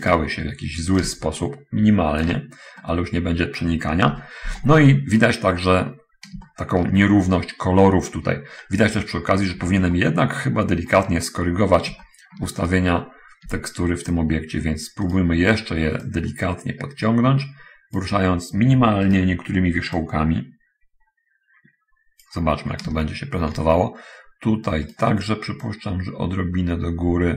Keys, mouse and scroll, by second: 0.4 right click, 1.4-2.7 shift+drag, 3.1 middle click, 4.4 7, 5.8-6.5 scroll up 1, 6.5 shift+middle click, 7.4-7.7 shift+scroll up 1, 8.8 scroll down 1, 9.5-10.1 shift+scroll down 1, 10.3 shift+middle click, 10.9 shift+scroll down 1, 11.8 shift+scroll down 1, 12.3 shift+middle click, 12.7 shift+right click, 13.8 Tab, 15.5 right click, 16.4-18.5 drag, 19.4 right click, 20.0-22.8 drag, 22.9 scroll down 1, 23.1 shift+middle click, 25.3 right click, 26.0-27.3 drag.